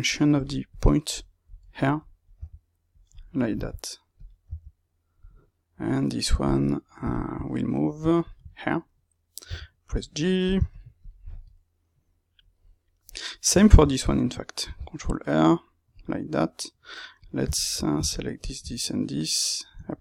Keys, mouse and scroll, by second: 0.6 click, 1.1-4.1 middle drag, 2.3 g, 4.1 click, 4.4 g, 5.1-6.4 middle drag, 6.4 click, 7.4 middle click, 8.2 shift+click, 8.4-10.0 middle drag, 9.4 g, 10.4 click, 11.4-17.1 middle drag, 14.5 ctrl+r, 17.1 click, 18.6-20.0 middle drag.